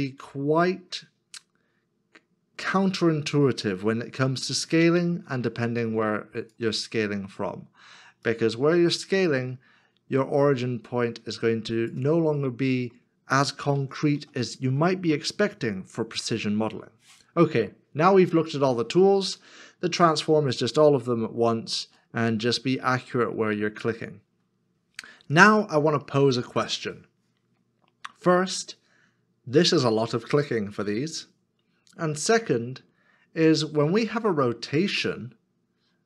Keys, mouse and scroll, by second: 12.4 middle click, 13.8 ctrl+z, 15.3 ctrl+z, 22.0 middle click.